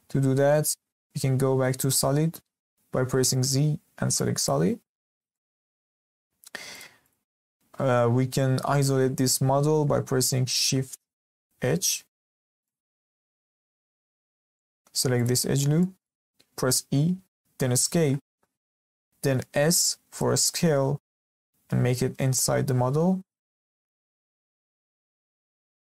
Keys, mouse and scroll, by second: 3.3 z, 5.0-5.3 scroll down 2, 5.3-6.7 shift+middle drag, 6.7 click, 7.0 click, 11.5 shift+h, 12.5 scroll up 1, 12.6-13.1 middle drag, 13.1 scroll up 1, 13.4 shift+middle click, 13.9 Tab, 14.5-15.1 middle drag, 15.1 alt+click, 15.8 middle click, 16.6 e, 19.5 s, 24.6-24.9 scroll up 2, 24.9-25.8 shift+middle drag.